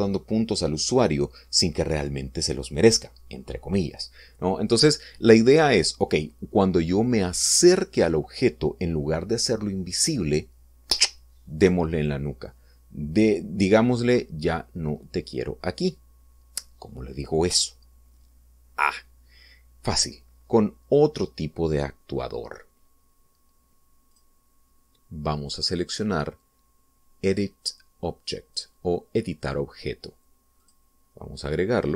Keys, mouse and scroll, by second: 25.0 click, 31.5 click.